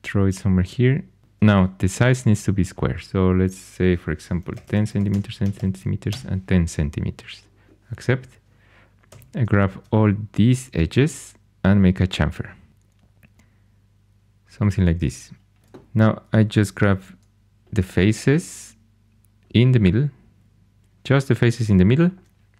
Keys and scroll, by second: 4.1-5.4 typing, 6.0 Tab, 9.1 2, 16.7 3.